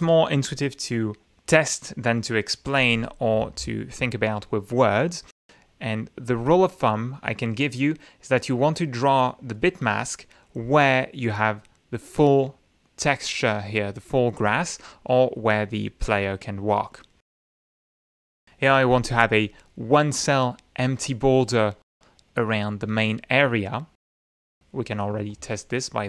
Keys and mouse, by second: 9.5-13.9 drag, 16.7-19.3 drag, 25.2 click.